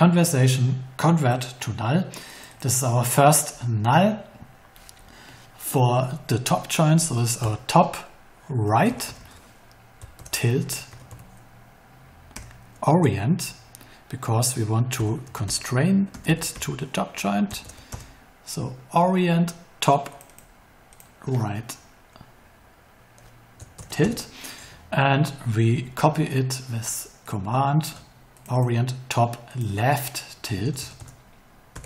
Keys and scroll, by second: 7.4 Right, 8.4-12.3 typing, 13.0 Left, 14.7-17.6 typing, 17.8 Return, 23.7 shift+-, 24.0 Return, 30.4 BackSpace, 31.7 l.